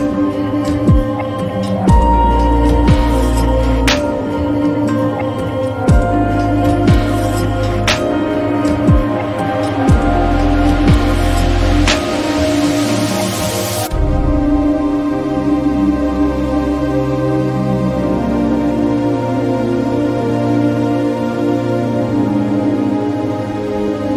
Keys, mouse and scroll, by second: 0.2 typing, 8.1 click, 8.1 typing, 11.6 click, 11.6-17.9 drag, 20.7 click, 22.1 click.